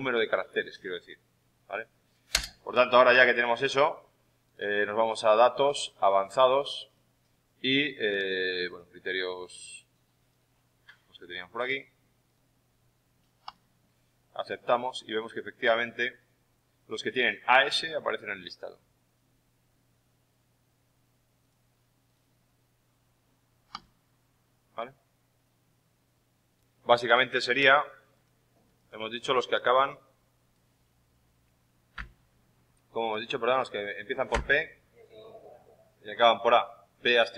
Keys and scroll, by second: 34.2 shift+p.